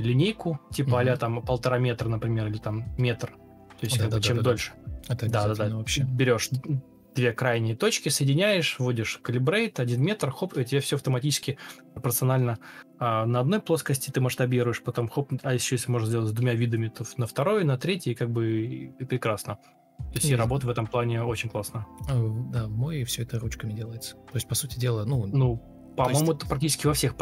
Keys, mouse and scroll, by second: 0.0-2.5 typing, 3.0 ctrl+space, 3.6 ctrl+space, 5.8 ctrl+space, 8.6 BackSpace, 8.6 BackSpace, 8.6 Return, 20.0 ctrl+s, 20.8 ctrl+space, 22.5-23.3 typing, 24.3 ctrl+space.